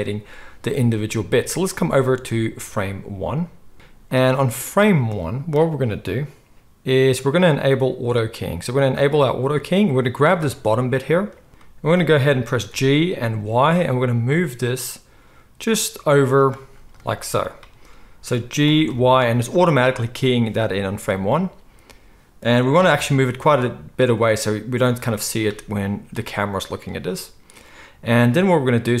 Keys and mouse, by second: 9.0-10.2 middle drag, 10.2 click, 10.3-29.0 middle drag, 12.7 g, 18.7 g, 22.7 g.